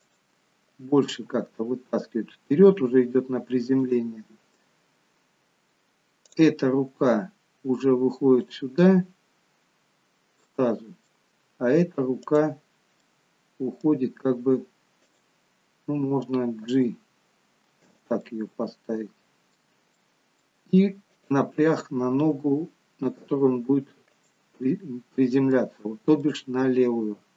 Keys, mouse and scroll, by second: 1.2 g, 6.3 click, 7.0 g, 10.4 middle click, 12.2 click, 13.1 middle click, 13.9 g, 16.8 g, 18.3 middle click, 21.1 click, 22.3 g, 24.7 middle click, 26.2 middle click.